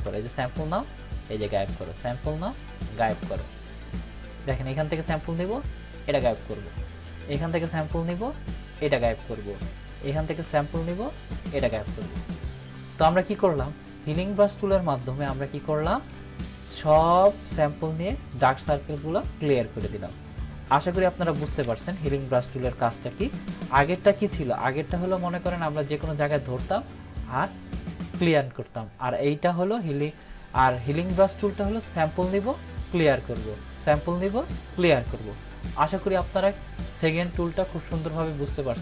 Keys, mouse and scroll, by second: 3.0 alt+click, 5.3 alt+click, 7.7 alt+click, 10.5 alt+click, 11.5 click, 15.3-16.2 click, 21.1 click, 21.4 ctrl+-, 22.8 ctrl+=, 24.9-25.8 click, 29.5-30.4 drag, 32.1-37.6 drag.